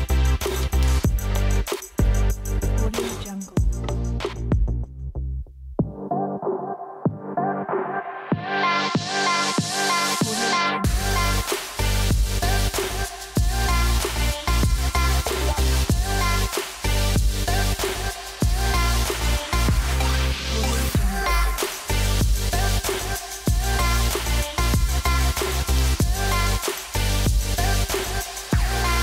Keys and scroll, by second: 0.0-1.6 typing, 3.6-5.9 typing, 22.0 super+z, 24.6 super+z, 27.1 super+z, 28.6 super+z.